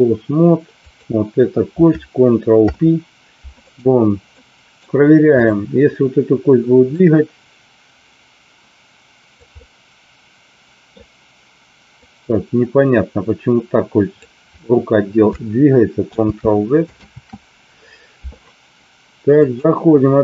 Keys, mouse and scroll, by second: 0.8 click, 2.6 ctrl+p, 4.3 middle click, 5.4 click, 6.8-9.3 drag, 9.6-10.9 middle drag, 11.9-14.2 drag, 16.2 ctrl+z, 19.4-20.2 drag.